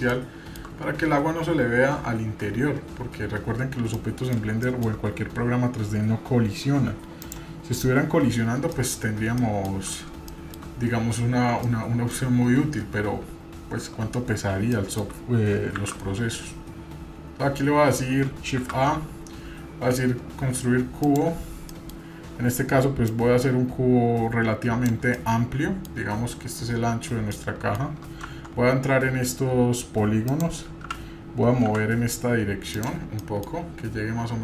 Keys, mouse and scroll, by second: 0.1 shift+middle click, 3.9 middle click, 4.6 shift+middle click, 8.7 middle click, 8.9-9.4 scroll down 2, 9.4 middle click, 10.3 shift+middle click, 11.6 middle click, 14.7 middle click, 15.8 shift+a, 18.6 shift+a, 21.8 middle click, 22.0 scroll up 1, 23.1-24.9 drag, 25.2 middle click, 27.3-27.8 middle drag, 28.3 Tab, 30.2 click, 30.8 g, 33.2 middle click.